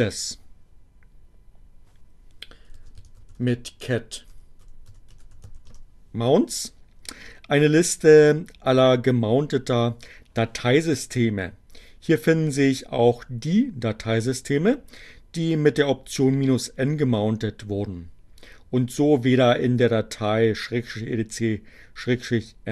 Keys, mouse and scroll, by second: 2.1-5.9 typing.